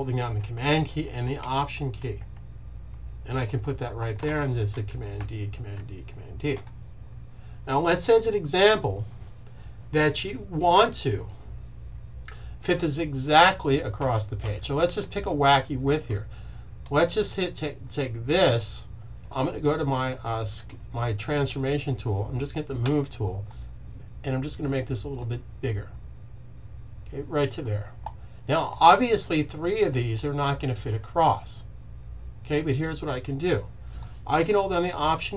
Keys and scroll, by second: 5.1 super+d, 5.6 super+d, 13.9 super+z, 14.3 super+z, 14.7 super+z, 22.7 v.